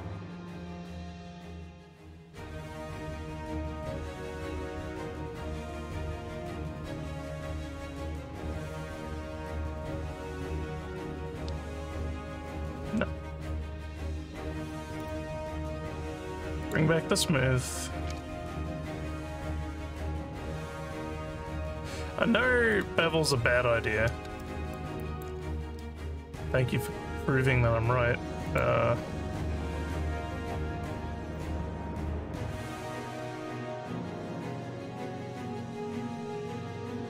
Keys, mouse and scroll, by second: 4.7 click, 5.0 click, 7.8 alt+click, 8.7 alt+middle click, 9.4 alt+scroll down 1, 9.8 alt+click, 10.9 click, 13.5 scroll down 1, 15.0 click, 16.7 click, 22.7 click, 24.4 alt+middle click, 25.0 alt+click, 28.5 click, 29.1 scroll down 3, 29.8 scroll down 2, 30.2 scroll up 1, 30.6 scroll down 3, 31.4 click, 35.2 scroll up 3.